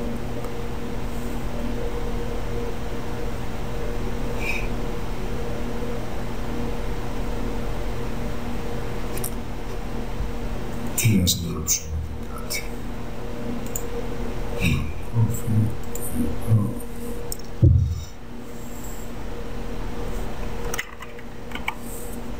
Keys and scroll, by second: 21.7 s.